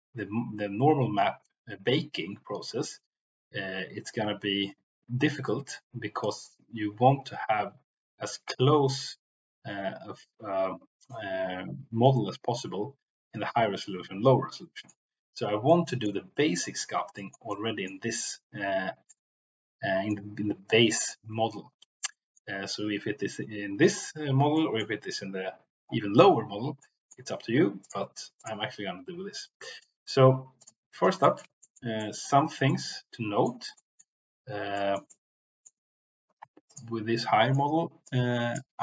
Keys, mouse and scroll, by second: 14.4-14.9 middle drag, 15.6-16.1 middle drag, 17.1 shift+middle click, 17.5 middle click, 19.1-20.1 middle drag, 22.0 middle click, 24.5 middle click, 26.7 middle click, 27.9-28.4 drag, 29.8 middle click, 30.5 click, 31.2 middle click, 31.6 shift+middle click, 32.0 middle click, 32.7 middle click, 33.7 middle click, 34.7 shift+middle click, 35.1 middle click, 36.6 click, 37.2 middle click, 38.0 click.